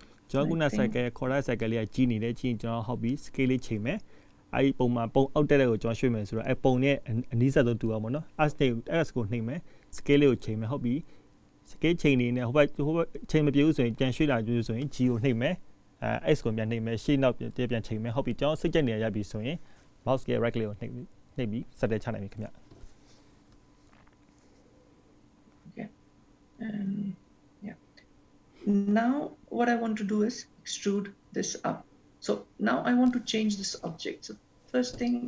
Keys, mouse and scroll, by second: 1.8 g, 4.6 s, 26.0-26.6 scroll down 2, 26.6-27.4 scroll down 8, 27.4-28.6 scroll up 11, 28.6-29.4 scroll down 1, 35.0 click, 35.1 click.